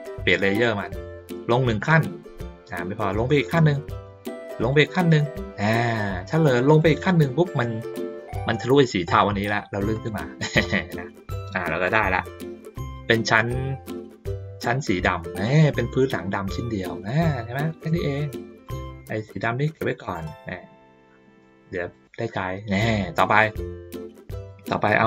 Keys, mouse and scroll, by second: 1.8 click, 3.4 click, 4.6 click, 6.6 click, 9.9 click, 17.2 ctrl+middle click, 17.8 middle click, 18.6 click, 20.1-21.4 drag, 21.9 click, 22.4-23.4 middle drag, 24.3 ctrl+middle click, 24.8 ctrl+middle click.